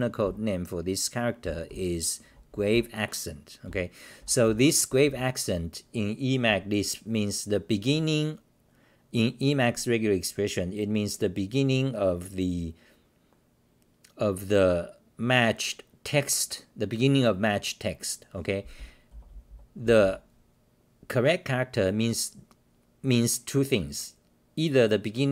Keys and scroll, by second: 0.2 w, 1.4-5.5 typing, 19.1-21.0 typing.